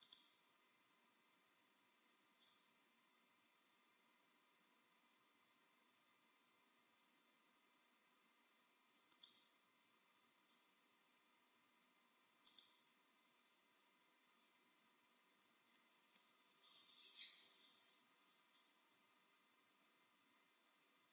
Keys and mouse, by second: 0.9-1.9 drag, 10.4-12.1 drag.